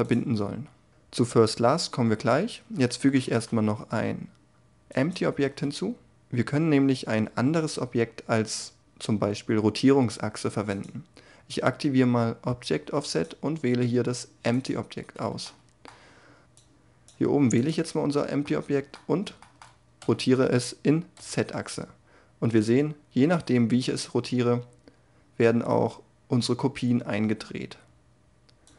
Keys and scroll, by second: 2.1 a, 3.3 shift+a, 19.5 r, 21.1 z.